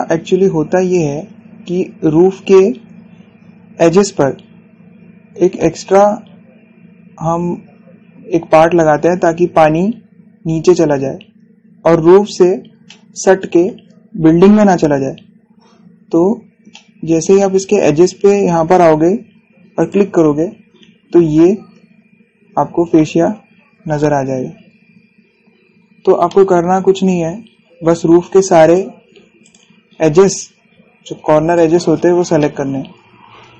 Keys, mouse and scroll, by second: 1.2 scroll up 1, 13.2 scroll down 1, 13.5-17.0 shift+middle drag, 17.1 scroll down 1, 17.4-19.7 shift+middle drag, 19.7 scroll up 1, 20.4 click, 25.4 scroll down 1, 26.9-28.1 shift+middle drag, 28.1 scroll up 1, 29.3 click, 30.5 scroll down 1, 32.1 click, 32.5 scroll down 1, 33.1-33.5 shift+middle drag.